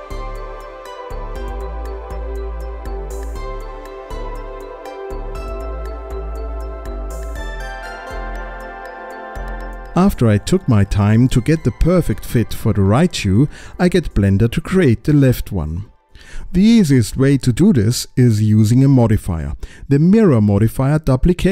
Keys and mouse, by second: 0.3 space, 0.5 click, 1.0 click, 2.0 space, 2.3 click, 3.4 click, 3.5 click, 3.6 middle click, 4.2 click, 4.7 click, 5.4 middle click, 5.8 click, 6.2 middle click, 7.0 space, 7.1 click, 7.4 click, 7.7 click, 8.2 s, 8.5 click, 9.1 alt+z, 9.4 alt+z, 9.4 click, 9.8-11.0 middle drag, 11.1 s, 11.5 middle click, 12.3 space, 12.7 click, 13.2 middle click, 13.9 alt+z, 14.0 click, 14.5 alt+z, 14.5 click, 14.7 s, 15.2 click, 15.6 click, 21.2 click.